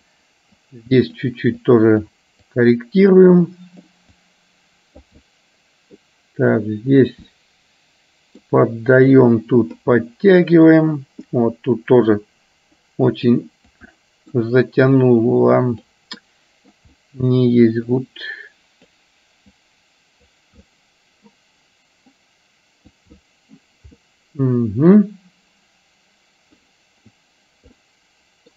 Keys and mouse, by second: 0.8 click, 1.8 click, 2.5 click, 3.5 click, 4.1-5.1 drag, 5.4 middle click, 6.6 click, 7.4-8.5 middle drag, 9.3 click, 10.0 middle click, 12.3 click, 13.4 click, 14.0 middle click, 15.1 click, 16.4 middle click, 17.0 middle click, 18.0-19.0 drag, 19.6 click, 20.8 middle click, 22.3 click, 23.3 middle click, 24.1-26.6 middle drag, 27.9 middle click.